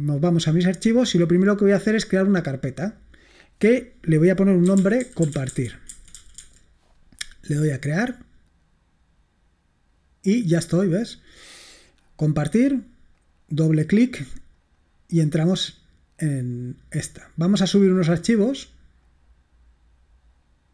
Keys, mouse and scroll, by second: 0.0 click, 2.8 click, 4.5-6.9 typing, 8.3 click, 11.0 click, 12.9 click, 13.2 click, 14.9 click, 19.2 click.